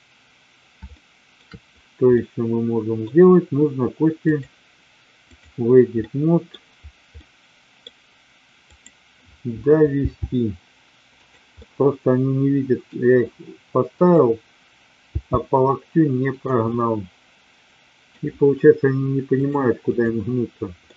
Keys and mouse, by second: 0.9-1.4 shift+middle drag, 2.0-3.0 middle drag, 4.1-5.5 drag, 6.0 middle click, 7.1 middle click, 8.7 click, 10.0 g, 11.1 click, 11.5-12.9 middle drag, 13.9 click, 15.0 g, 16.4 click, 16.7-18.0 middle drag, 19.4 click, 20.8-20.9 middle drag.